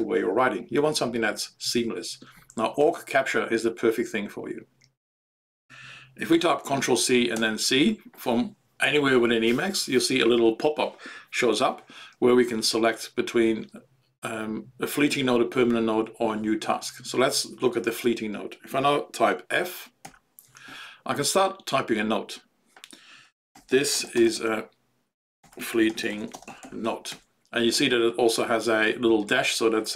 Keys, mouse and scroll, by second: 20.1 q, 23.3-27.6 typing.